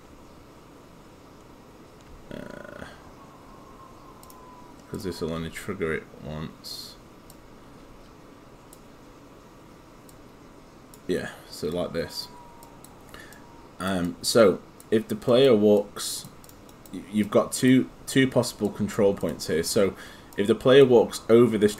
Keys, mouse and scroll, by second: 4.2 alt+click, 7.3 click, 16.7 right click, 17.3 click.